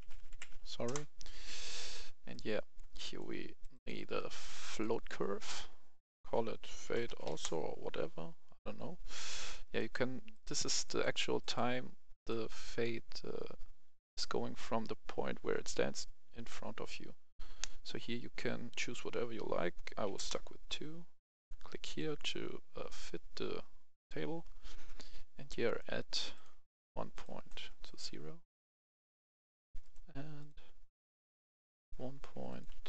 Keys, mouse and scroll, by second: 0.0 Right, 0.1 Right, 0.3 Right, 0.5 BackSpace, 0.9 Return, 1.5 click, 6.6-7.2 typing, 9.4 Return, 9.5 click, 20.0 2, 20.1 Return, 21.3 click, 25.6 right click, 26.3 click, 27.7 KP_0, 27.8 click, 29.8 right click, 30.4 click, 32.0 KP_1, 32.4 click, 32.7 KP_2.